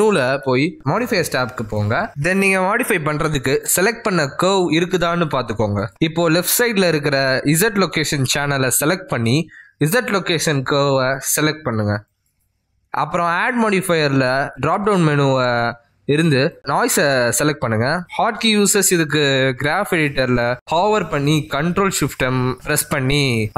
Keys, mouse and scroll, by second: 0.2 n, 1.1 n, 1.7 n, 3.1 click, 8.9 click, 10.8 click, 14.6 click, 16.0 click, 21.3 ctrl+z.